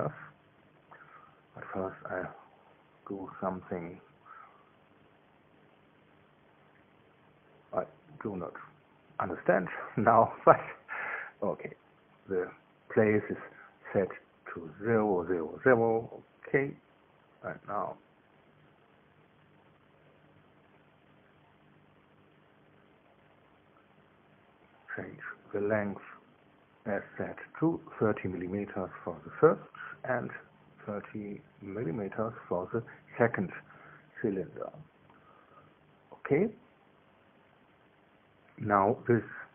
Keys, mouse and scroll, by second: 3.8 click, 6.0 click, 8.4 click, 9.4 KP_0, 9.7 Tab, 10.0 KP_0, 10.7 Tab, 14.1 click, 16.6 click, 17.2-18.0 scroll down 1, 18.0 scroll down 1, 18.3 scroll up 1, 25.0-26.1 drag, 26.1-27.3 scroll up 1, 27.3 click, 28.3 KP_3, 28.5 KP_0, 28.9 KP_Enter, 30.4 click, 31.8 click, 32.9 KP_3, 33.1 KP_0, 34.3 KP_Enter, 36.8-39.5 middle drag.